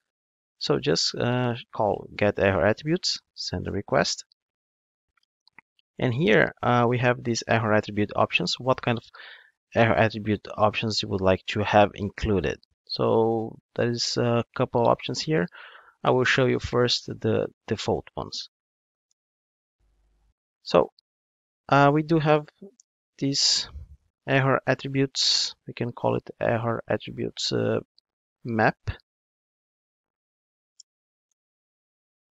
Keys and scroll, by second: 2.7 Return, 6.1 super+p, 16.9 Return, 22.8 alt+Return, 28.0 Escape, 30.0 super+z.